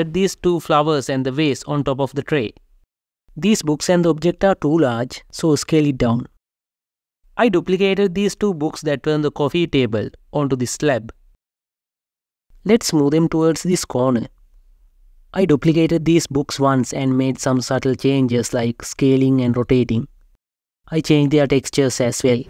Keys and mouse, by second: 0.2 z, 3.5 s, 3.9 ., 5.6 7, 6.5 Return, 7.2 shift+d, 7.5 x, 11.3 g, 11.5 z, 12.8 g, 12.9 shift+z, 15.1 g, 15.3 z, 16.8 s, 17.9-19.9 typing, 19.7 click.